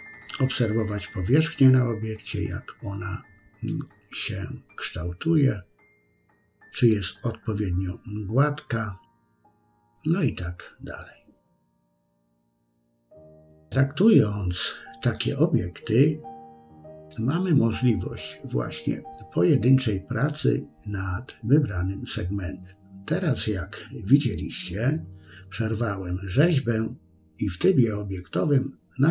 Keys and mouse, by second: 0.8 click, 1.3 click, 1.8 middle click, 2.2 click, 2.6 click, 4.0 ctrl+r, 4.6 middle click, 5.1 shift+click, 5.2 shift+click, 5.4 shift+click, 5.5 shift+click, 5.9 shift+click, 6.6 shift+click, 6.9 middle click, 7.8 shift+middle click, 8.5 KP_3, 9.2 click, 9.7 click, 10.9 ctrl+r, 11.4 shift+click, 12.5 middle click, 13.2 shift+middle click, 13.6 middle click, 14.3 KP_3, 15.4 Tab, 16.8-19.2 drag, 21.2 s, 22.8 g.